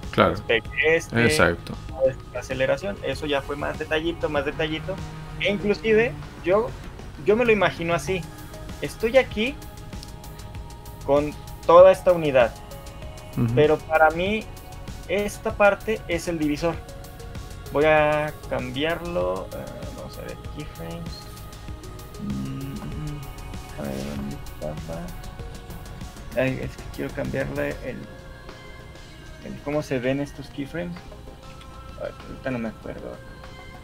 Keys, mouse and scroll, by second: 0.1 right click, 1.5 right click, 9.5 middle click, 9.5 click, 10.9 click.